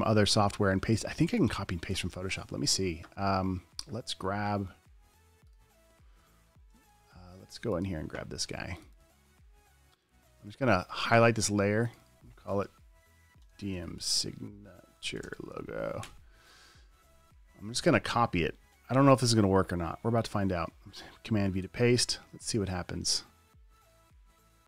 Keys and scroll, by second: 13.5-16.4 typing, 19.1 super+c, 21.9 super+v.